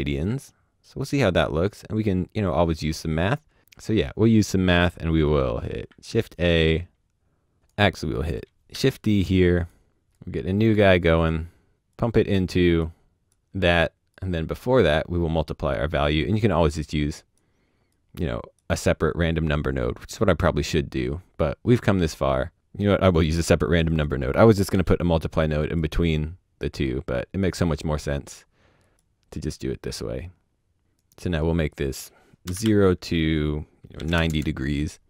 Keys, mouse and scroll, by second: 2.5 click, 5.1 click, 5.8 shift+a, 6.9 a, 6.9 click, 7.6 middle click, 8.2 shift+click, 8.4 shift+d, 9.1 click, 11.2 click, 22.8 click, 24.7-25.6 shift+middle drag, 25.6 click, 29.4 click, 30.0 click, 32.4 KP_0, 32.6 Tab, 33.9 KP_9, 34.0 KP_0, 34.2 KP_Enter.